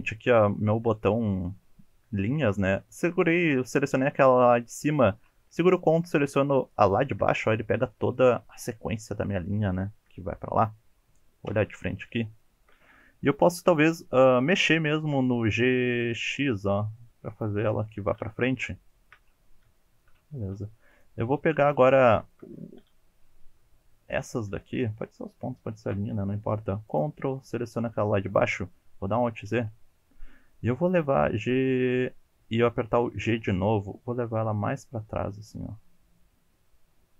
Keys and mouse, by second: 4.7 shift+click, 7.9 shift+click, 10.1 KP_3, 11.5 KP_1, 12.5 shift+click, 13.8 g, 15.8 x, 17.3 click, 17.8 shift+middle click, 18.9 shift+middle click, 19.8 shift+middle click, 20.5 1, 20.9 click, 22.2 shift+middle click, 23.6 2, 24.1 click, 24.6 shift+middle click, 25.0 shift+middle click, 25.4 shift+middle click, 29.1 alt+z, 29.5 KP_1, 30.9 g, 33.2 g.